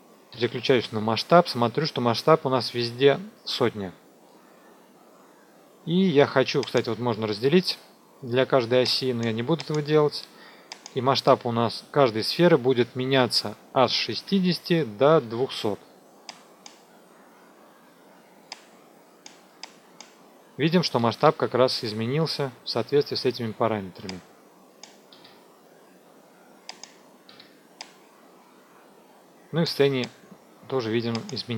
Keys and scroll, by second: 0.3 s, 14.2 KP_6, 14.6 Tab, 15.2 KP_2, 15.3 KP_0.